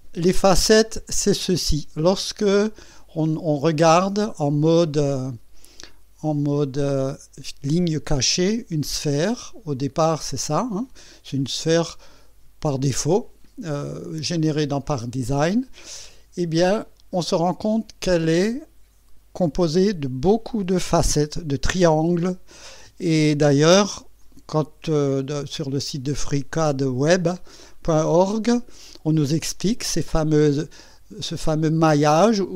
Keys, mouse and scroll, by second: 6.3 click, 10.1 click, 17.1 click, 18.5 click, 24.2 click.